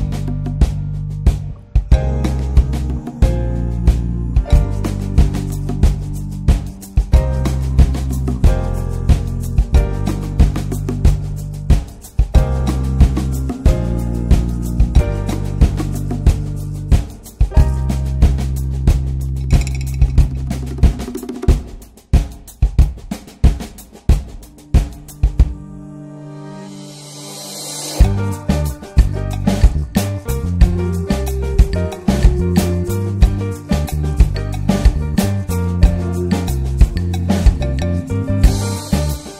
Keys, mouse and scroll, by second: 5.4 Left, 6.2-14.4 drag, 14.9-17.0 drag, 19.7-24.5 shift+drag, 24.7 ctrl+z, 24.9 click, 25.5 ctrl+z, 25.6-30.3 drag, 30.7 shift+middle click, 31.3-36.1 shift+drag, 36.1 scroll down 2, 36.2 middle click, 36.5 scroll up 1, 36.6 scroll down 3, 36.8-37.2 middle drag, 37.2 ctrl+shift+click, 37.7-38.4 middle drag, 38.4-39.3 drag.